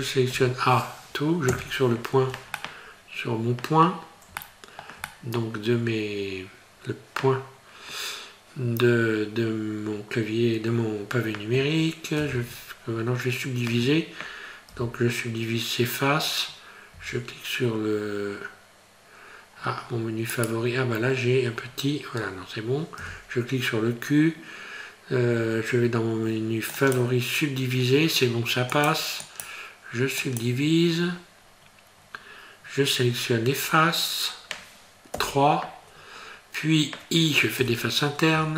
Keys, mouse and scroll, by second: 0.3 a, 1.5 KP_Decimal, 2.6 middle click, 4.4 shift+middle click, 5.1 middle click, 12.2 ctrl+r, 21.5 scroll down 4, 21.7 scroll up 2, 21.9-22.3 scroll down 1, 23.0 q, 28.7 click, 29.3 click, 30.2 click, 31.5-32.0 scroll up 3, 32.0-33.3 scroll down 2, 35.1 3, 37.6 i.